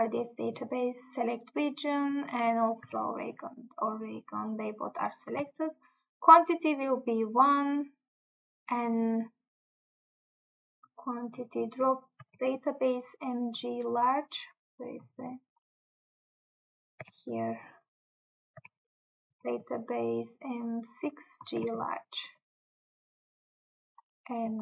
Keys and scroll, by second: 5.4 Tab, 12.4 Tab, 17.1 Tab, 18.7 Tab, 19.4 Tab, 21.6 Tab.